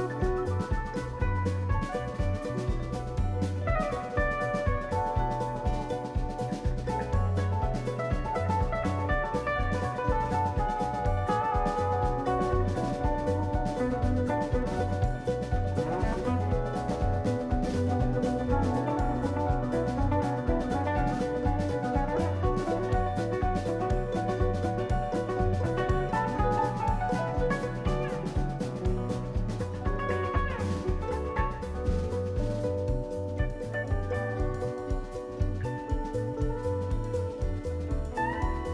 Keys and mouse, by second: 0.7-2.9 shift+middle drag, 2.9 g, 5.4 click, 5.9-6.7 ctrl+middle drag, 6.7 drag, 7.1 click, 8.6 n, 9.4-12.0 drag, 12.3-14.4 drag, 15.6 n, 16.0 g, 17.5-18.1 ctrl+middle drag, 18.1 g, 19.2 n, 20.0-21.1 shift+middle drag, 21.1 click, 21.7 g, 24.4 click, 25.0-28.7 drag, 29.2 click, 30.1 click, 31.8-33.0 shift+middle drag, 33.0-34.2 drag, 34.3-35.4 drag, 35.5-36.6 drag, 36.7-37.8 drag, 38.4-38.7 shift+middle drag.